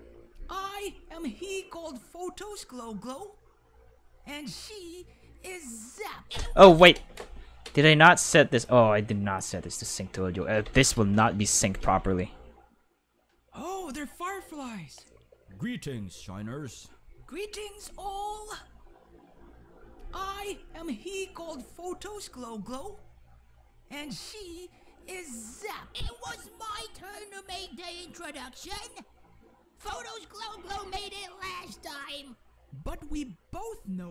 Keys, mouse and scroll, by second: 6.8 space, 7.7 click, 8.5 click, 9.3 click, 10.6 ctrl+s, 11.8 space.